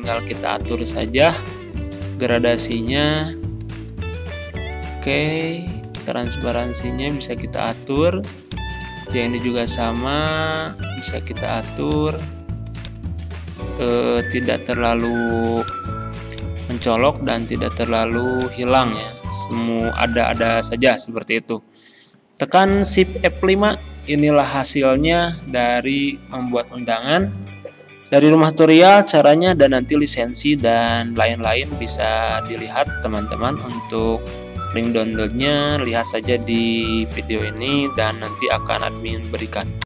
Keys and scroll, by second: 23.3 shift+F5.